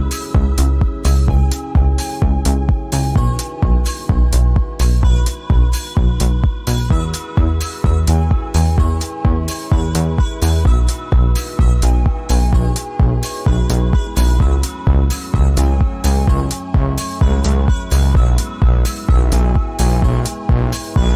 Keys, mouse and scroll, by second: 1.1 click, 2.5-4.6 drag, 5.8 click, 8.3 click, 9.8 scroll up 1, 10.8 click, 11.0 scroll up 1, 13.3-14.9 drag, 17.3 alt+scroll down 1, 18.3-19.8 drag, 19.8 click, 20.2 alt+scroll up 1.